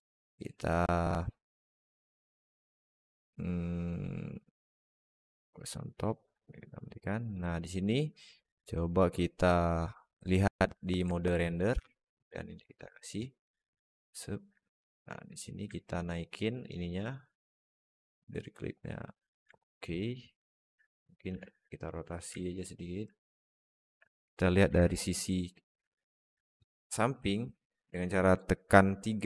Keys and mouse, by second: 10.3 click, 11.0 alt+middle click, 11.4 drag, 11.6 s, 14.4-14.8 middle drag, 15.6 alt+middle click, 17.0-19.2 drag, 19.4-20.4 alt+middle drag, 24.5 KP_3, 25.7 alt+shift+middle click.